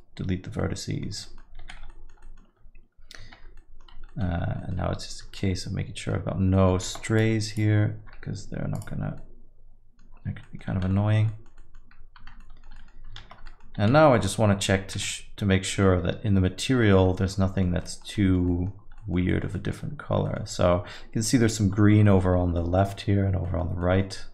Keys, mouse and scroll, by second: 0.8 middle click, 1.2 alt+middle click, 1.6 z, 1.9 alt+middle click, 2.2 middle click, 3.4 Tab, 3.6 alt+middle click, 4.1 middle click, 4.4-5.8 scroll up 3, 4.6 middle click, 5.8 Tab, 5.8 middle click, 5.8-6.4 scroll up 2, 6.5 middle click, 6.8 shift+z, 7.1 click, 8.0 x, 9.6 middle click, 10.1 scroll down 5, 10.4 middle click, 10.9 middle click, 10.9 a, 11.3 alt+middle click, 11.5 middle click, 11.8 scroll down 1, 12.4 Tab, 12.4 alt+middle click, 12.7 middle click, 13.2 shift+z, 13.4 middle click, 13.7 z, 14.9 z, 16.3 alt+middle click, 17.1 alt+middle click, 17.8 middle click, 18.2 alt+middle click, 18.5 middle click, 18.8 scroll down 1, 19.0 middle click, 19.3 alt+middle click, 19.6 middle click, 20.0 scroll down 1, 20.3 middle click, 22.0 middle click, 22.4 scroll up 3, 22.6 middle click, 23.0 scroll down 1, 23.5 middle click, 23.8 middle click.